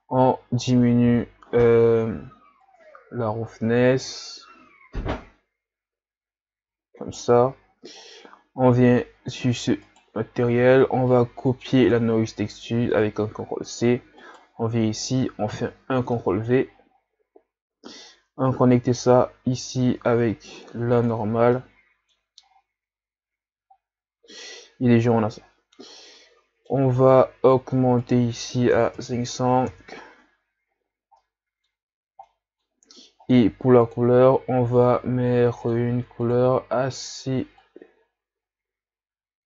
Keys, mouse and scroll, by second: 2.7-5.6 drag, 9.5-9.8 scroll down 10, 9.8 right click, 14.3 right click, 15.5 ctrl+v, 21.0 click, 22.5-22.8 scroll up 5, 23.4-24.1 scroll down 3, 29.7 KP_0, 31.9-34.3 middle drag, 35.8 click, 37.2 click.